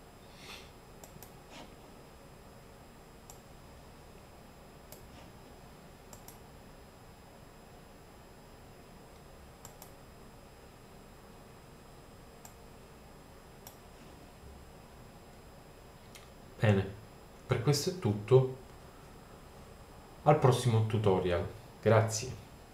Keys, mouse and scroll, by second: 3.3-4.6 drag, 4.6 middle click, 6.1-7.8 drag, 7.8-8.4 middle drag, 12.5 middle click, 12.9-14.2 drag, 14.3-14.8 drag, 18.0-20.6 middle drag, 21.9 click.